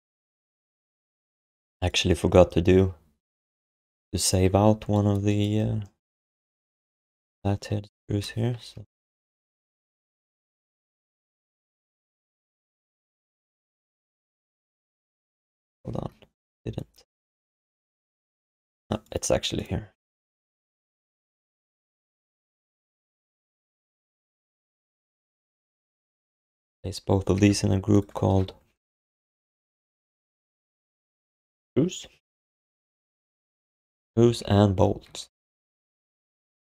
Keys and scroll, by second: 1.2 ctrl+s, 2.4 alt+q, 2.7 alt+q, 4.4 shift+h, 8.1 ctrl+d, 9.1 shift+p, 9.6 alt+q, 16.5 alt+q, 18.3 f, 19.9 w, 22.8 shift+p, 24.6 ctrl+s, 27.3 ctrl+g, 29.6-32.0 typing, 34.3-36.2 typing.